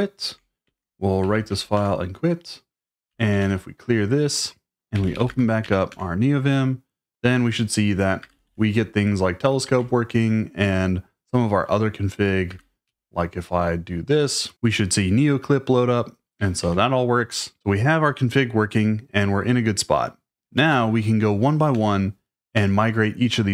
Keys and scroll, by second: 0.0-2.0 typing, 3.1-5.9 typing, 8.2 typing, 9.7 ctrl+c, 12.5-12.8 typing, 16.6 ctrl+c, 20.5 typing, 21.7 Return, 22.5 Return.